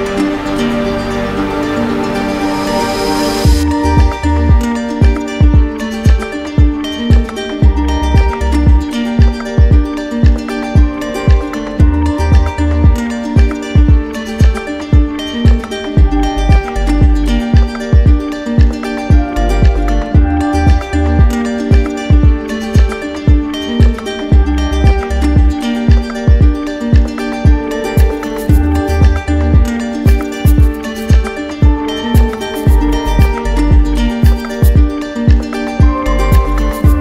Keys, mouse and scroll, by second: 0.0 alt+middle click, 3.6 right click, 4.7 right click, 5.3 shift+right click, 6.2 shift+right click, 6.6 alt+right click, 7.8 right click, 8.3 alt+right click, 9.8 alt+right click, 10.6 alt+right click, 11.5 alt+click, 12.8 d, 13.4 d, 13.6 d, 15.0 d, 17.6 z, 18.5-19.6 drag, 19.6-20.7 right drag, 21.2 click, 22.7 click, 25.4 click, 27.2 click, 28.8 click, 30.1 click, 31.8 click, 33.8 click, 34.9 click, 36.3 click.